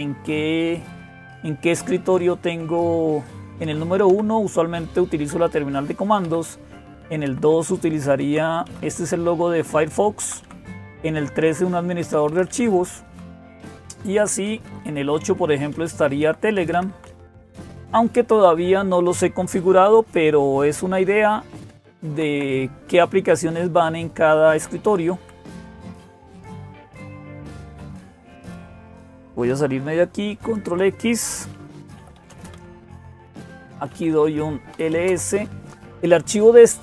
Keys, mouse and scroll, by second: 0.0-36.8 typing, 0.0 Down, 0.6 Up, 0.8 Up, 1.0 Up, 2.3 Up, 3.5 Up, 3.9 Down, 6.1 Down, 7.1 Down, 8.0 Down, 8.5 Up, 8.7 Up, 9.3 Left, 10.0 Down, 10.2 Down, 10.6 Up, 11.8 Down, 12.5 Down, 12.8 Down, 13.4 Down, 13.6 Down, 14.3 Up, 14.5 Up, 15.0 Up, 15.6 Right, 16.0 Left, 16.6 Down, 16.7 Down, 17.0 Down, 17.6 Up, 17.8 Up, 18.0 Up, 19.6 Up, 19.8 Up, 20.2 Up, 20.5 Up, 20.7 Up, 20.8 Up, 21.5 Left, 21.7 Left, 21.9 Left, 22.1 Left, 24.4 Down, 25.0 Down, 25.2 Down, 25.6 Down, 25.8 Down, 26.0 Down, 26.7-27.2 Down, 27.4 Down, 27.5 Down, 30.1 ctrl+x.